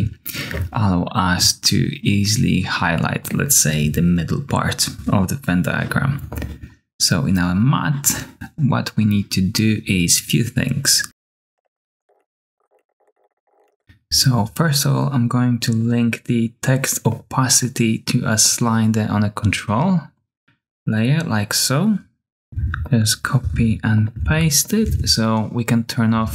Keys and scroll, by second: 12.0-13.9 typing, 22.5 super+c, 23.4 super+v, 24.1 super+v, 24.8 super+v, 26.2 super+a, 26.2 typing.